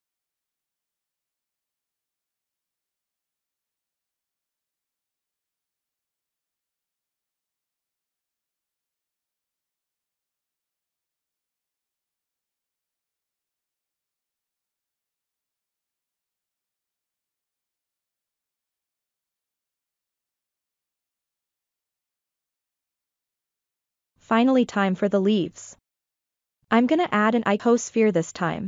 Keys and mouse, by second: 1.8-3.0 drag, 3.9 click, 5.0-8.9 middle drag, 9.1 ctrl+middle drag, 9.5-11.1 middle drag, 13.6-15.6 drag, 16.1-17.9 middle drag, 18.2 shift+middle drag, 18.6-20.9 middle drag, 22.0-22.5 shift+middle drag, 23.3 click, 25.2 KP_1, 26.5-26.9 shift+middle drag, 27.2 shift+a.